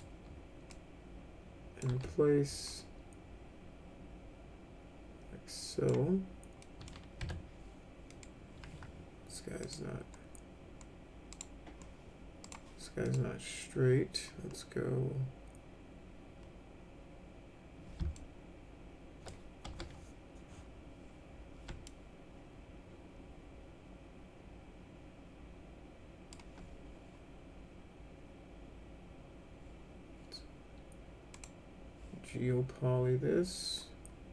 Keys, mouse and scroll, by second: 0.7-1.8 drag, 1.8 w, 2.7-5.9 drag, 6.6 middle click, 7.2 1, 8.1 middle click, 9.6 click, 11.3 click, 12.4 click, 13.0 click, 18.1-19.3 alt+middle drag, 19.7 F3, 21.9-26.3 alt+middle drag, 31.3 click.